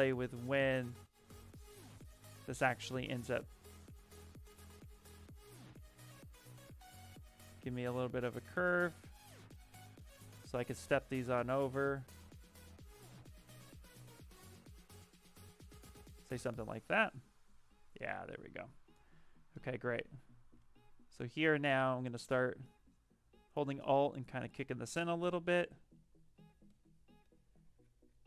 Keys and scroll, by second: 0.6 ctrl+z, 19.8 s, 20.4 s.